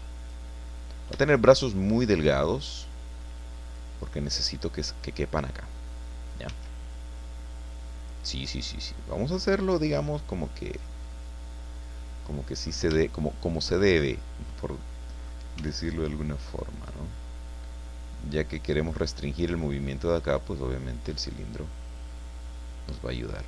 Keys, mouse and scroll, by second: 0.7-1.0 scroll up 2, 1.2 shift+middle click, 1.9 shift+scroll up 2, 2.7-3.9 drag, 4.1 scroll up 2, 6.5 s, 8.0 click, 9.3-12.8 drag, 13.0 shift+click, 14.8 click, 15.5-16.7 middle drag, 15.6 s, 16.7 click, 17.8-19.1 drag, 19.5 middle click, 20.4-23.1 drag, 23.3 middle click.